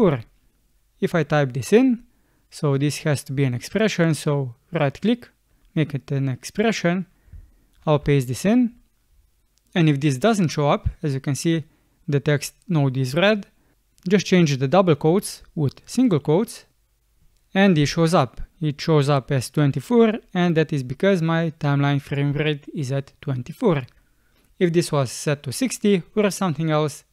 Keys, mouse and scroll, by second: 7.8 ctrl+v.